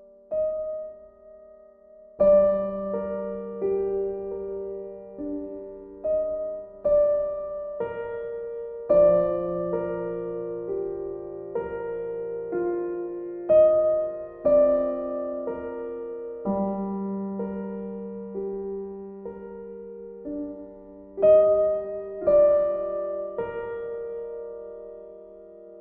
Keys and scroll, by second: 5.9 b, 7.3 ctrl+z, 14.8 b.